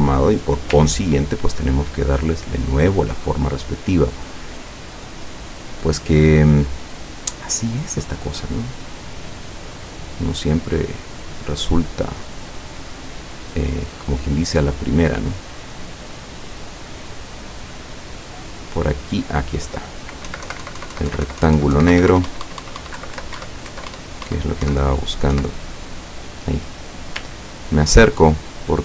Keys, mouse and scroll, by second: 1.1 ctrl+scroll up 1, 4.3-5.6 drag, 6.6-9.1 drag, 9.6-11.5 drag, 14.3 click, 15.2 click, 16.6-18.1 drag, 20.3 Right, 21.9 Up, 23.0 Left, 23.4 Up, 23.7 Left, 23.9 Up, 24.7 Right, 25.4 Right, 27.4-28.0 ctrl+scroll up 2, 28.4 ctrl+click.